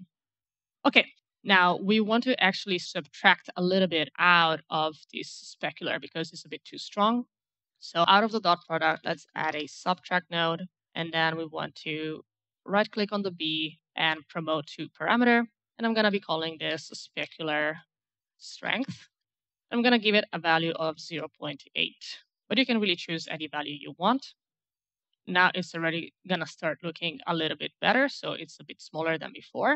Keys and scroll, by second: 8.2-9.8 typing, 10.2 Return, 16.4-20.8 typing, 21.0 Return.